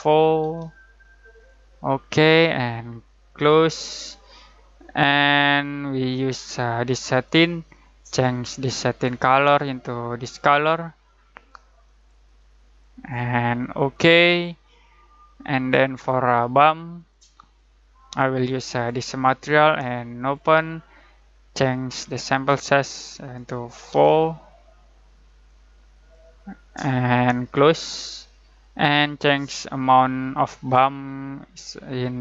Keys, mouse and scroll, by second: 0.4 4, 1.3 click, 5.6-16.1 drag, 16.9-23.9 drag, 23.9 4, 25.4-32.2 drag.